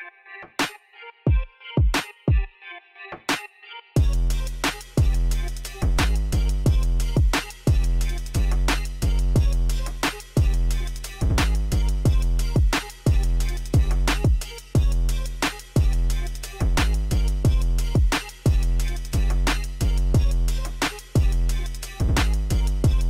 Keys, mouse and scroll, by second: 1.3 click, 13.9-18.0 middle drag.